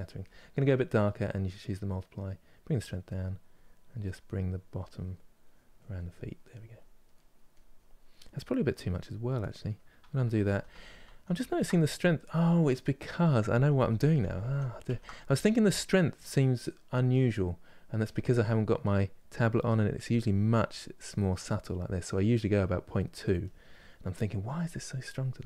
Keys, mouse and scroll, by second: 3.8-5.1 middle drag, 5.1 click, 5.7 middle click, 6.2 click, 6.8 middle click, 7.2 click, 7.7-9.9 middle drag, 9.9 ctrl+z, 10.1 ctrl+z, 10.4 ctrl+z, 11.1 ctrl+z, 11.3-13.2 middle drag, 13.2 ctrl+z, 13.4 ctrl+z, 14.1 ctrl+z, 14.8-17.7 middle drag, 17.7 click, 18.1 middle click, 19.0-20.3 drag, 20.3 middle click, 20.8 click, 21.3-23.2 middle drag, 23.2 click, 23.6 middle click, 24.1 click, 24.7 middle click, 25.2 click.